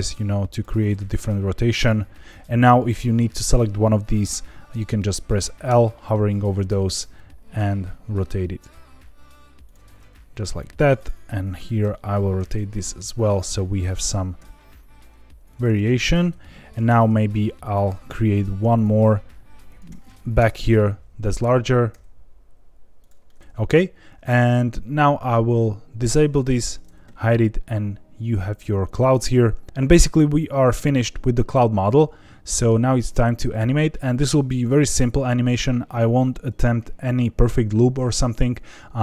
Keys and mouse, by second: 0.5 click, 5.6 l, 6.6 r, 6.8 r, 9.6 click, 10.9 click, 11.5 click, 11.8 l, 12.3 r, 12.6 z, 13.8 click, 14.3 g, 15.4 click, 16.0 middle click, 16.9 shift+d, 17.6 click, 17.9 s, 18.7 click, 18.9 g, 19.6 click, 20.3 KP_0, 21.9 g, 22.9 click, 23.2 middle click, 23.4 Tab, 25.1 click, 26.2 click, 27.2-29.1 middle drag, 31.8-32.6 middle drag.